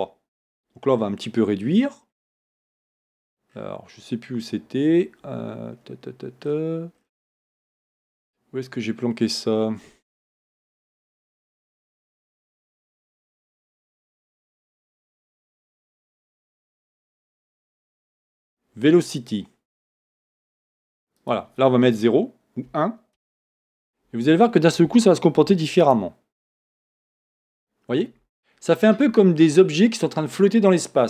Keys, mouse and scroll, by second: 5.8-9.5 scroll down 1, 12.6 scroll up 1, 20.3-28.1 drag, 23.5 Return.